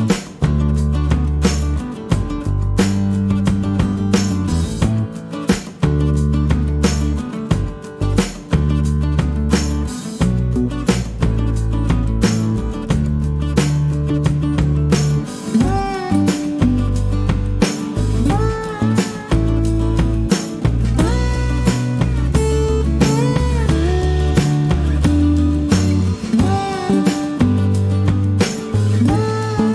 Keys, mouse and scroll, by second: 1.3 click, 4.5 click, 8.9 click, 10.5 click, 12.9-13.9 scroll down 6, 15.2 click, 20.2 click, 21.5-21.8 scroll up 2, 23.4 click, 26.3-27.4 drag, 27.9 click, 28.9 click.